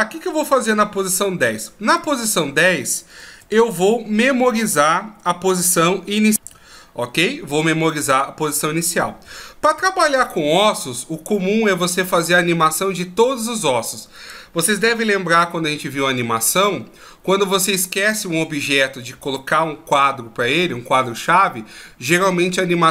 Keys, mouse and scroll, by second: 1.9 right click, 3.3 a.